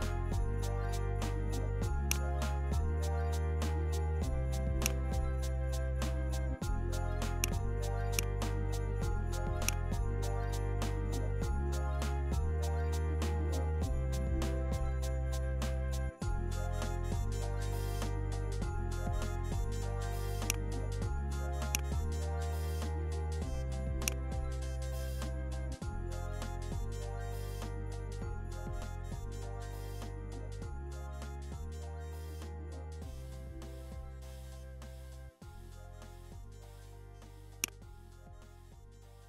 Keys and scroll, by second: 0.4 BackSpace, 2.9 BackSpace, 25.8-26.5 typing, 28.0 space, 29.0 shift+e, 30.1-31.5 typing.